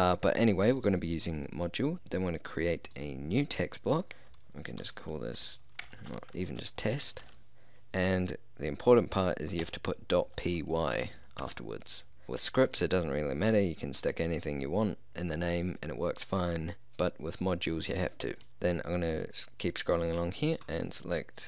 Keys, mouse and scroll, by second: 0.8-2.8 drag, 2.9-4.1 drag, 6.0 BackSpace, 20.6-21.4 drag.